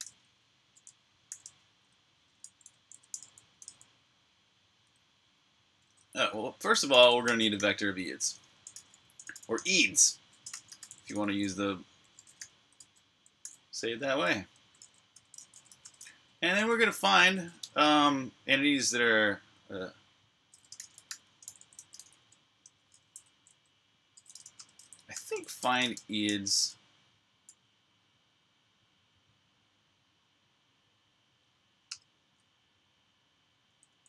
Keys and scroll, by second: 0.0-3.9 typing, 6.0-12.1 typing, 13.9-16.1 typing, 19.4-26.2 typing, 27.3 Tab, 31.7 Return, 33.5-33.9 typing.